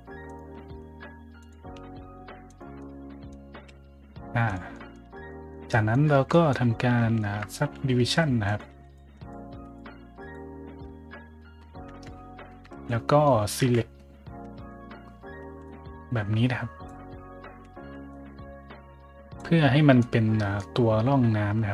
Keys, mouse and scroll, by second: 0.2 click, 0.4 s, 1.3 click, 1.7 s, 2.4 click, 2.7 middle click, 3.2-4.9 typing, 4.4 click, 4.6 middle drag, 5.2 middle drag, 5.8 right click, 6.1 Tab, 6.2 middle drag, 7.1 shift+middle drag, 8.4 click, 8.8 click, 9.0 w, 9.1 click, 9.4 w, 9.5 click, 10.0 w, 10.1 click, 11.4 Tab, 11.9 `, 12.5 Tab, 12.8-13.2 middle drag, 13.5 `, 14.4 a, 14.6 shift+middle drag, 15.4 b, 15.6-16.8 drag, 17.4 a, 17.7 b, 18.0-19.3 drag, 19.9-20.5 middle drag, 20.6 middle drag.